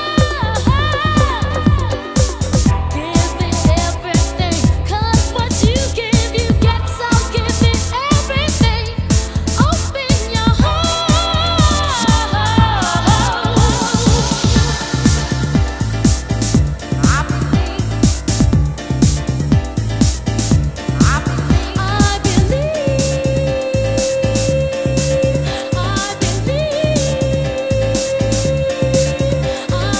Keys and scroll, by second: 3.7 super+Tab.